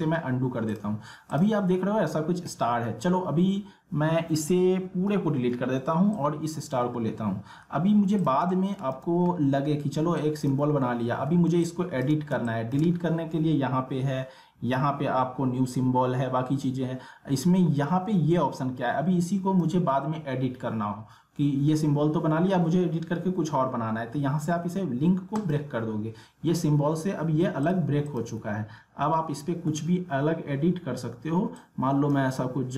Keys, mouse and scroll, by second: 0.7 click, 6.1 click, 7.0-7.6 alt+scroll up 1, 7.7-8.0 alt+scroll down 1, 8.2 click, 8.7 middle click, 9.0 space, 9.3 alt+scroll down 1, 9.6 alt+scroll up 1, 10.2 click, 10.7 alt+scroll down 1, 11.2 alt+scroll up 1, 11.5 space, 11.6 click, 12.0 space, 12.4 click, 19.3-22.1 drag, 25.4 click, 27.6 click, 28.6-29.0 alt+scroll up 2, 31.9 click.